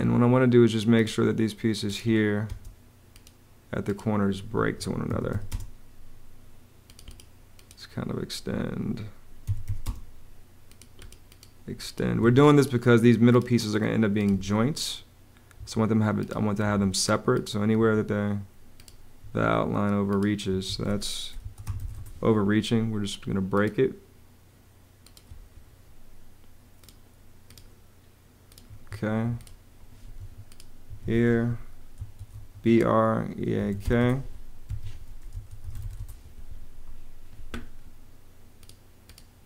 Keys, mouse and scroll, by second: 2.3 space, 4.4 Escape, 4.7-5.6 typing, 8.3 Escape, 9.0-10.0 typing, 12.0 Escape, 14.1 Escape, 15.4 Escape, 19.0 Escape, 20.3 Escape, 21.0-22.2 typing, 28.5 Escape, 30.0 Escape, 31.6-36.1 typing, 34.5 Escape.